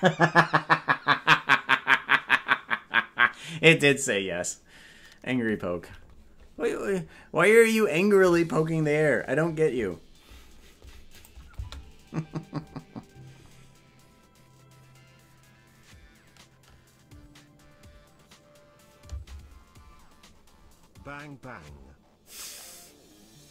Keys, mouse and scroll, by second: 11.1 click, 11.6 space.